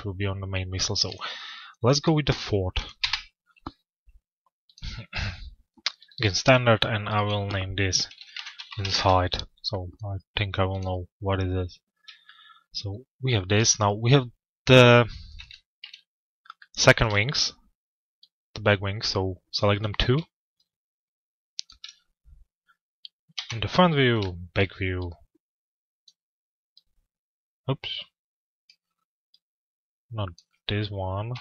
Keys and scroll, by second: 2.6 Return, 8.5 Return, 14.9 f, 15.8 z, 23.0 t, 30.8 p.